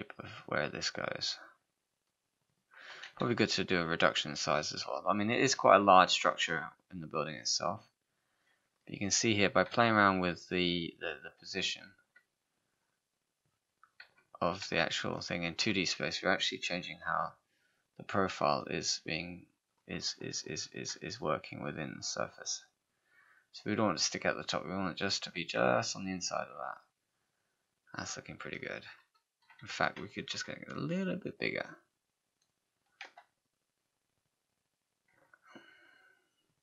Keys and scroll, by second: 9.7 w, 29.7 r, 33.0 w.